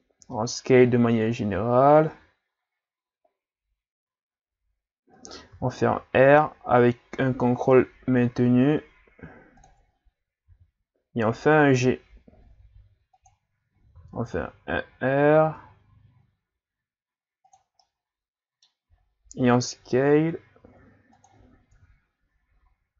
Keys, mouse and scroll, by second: 0.2 s, 5.6 r, 10.5 g, 13.9 r, 17.8-18.9 middle drag, 18.9 s, 21.7 KP_3.